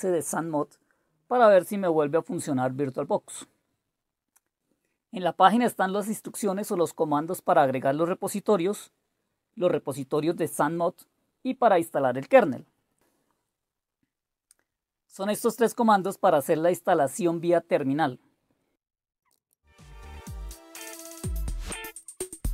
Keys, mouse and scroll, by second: 7.0-9.5 drag, 19.0-19.9 typing, 19.8 click, 20.1 click, 20.4 ctrl+c, 20.6 click, 20.8 ctrl+v, 20.9 Return, 20.9 Return, 21.2 super+Left, 21.4 click, 22.0 ctrl+c, 22.2 click, 22.4 ctrl+v.